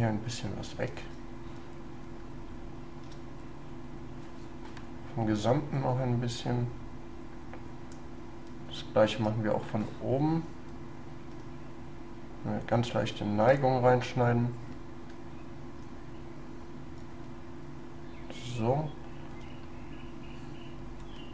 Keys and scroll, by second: 2.2 shift+space.